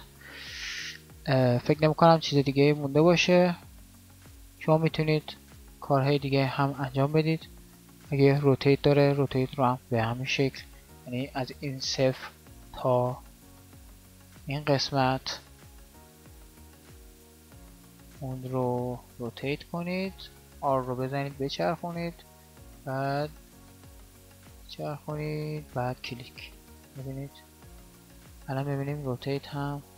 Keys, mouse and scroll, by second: 10.6 alt+a, 17.8 r.